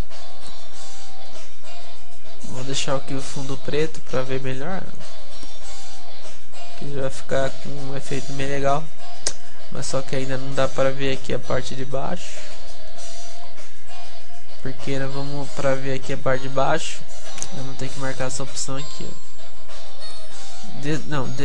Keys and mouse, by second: 0.0-6.9 middle drag, 8.3-10.1 middle drag, 12.2 p, 12.5-16.7 middle drag, 17.0 p.